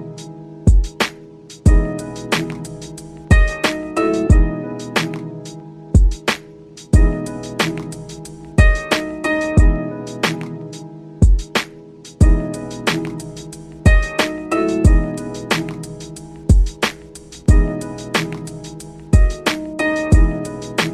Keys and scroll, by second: 2.5 ctrl+Home, 10.3 ctrl+z, 15.1 ctrl+z.